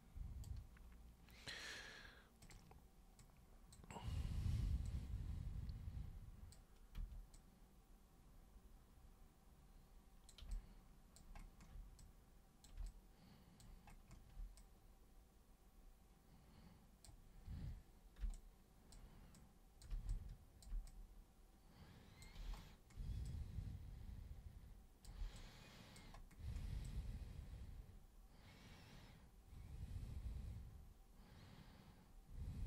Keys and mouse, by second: 2.4 super+click, 3.2 super+click, 4.4 super+3, 4.8-6.5 super+drag, 7.0 super+1, 7.3-10.3 super+drag, 10.5 alt+super+click, 11.4 alt+super+click, 11.9 super+click, 12.8 alt+super+click, 14.5-17.0 super+drag, 18.2 super+n, 18.3 click, 19.3 click, 20.1 click, 20.8-22.2 super+drag, 23.2-25.0 super+drag, 25.3 alt+super+click, 26.8-32.6 super+drag.